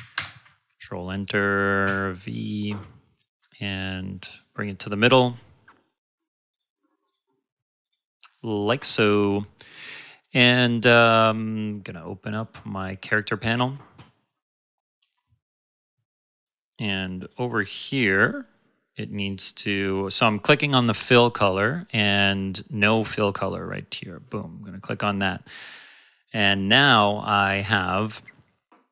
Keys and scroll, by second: 0.1 ctrl+Return, 1.8 v.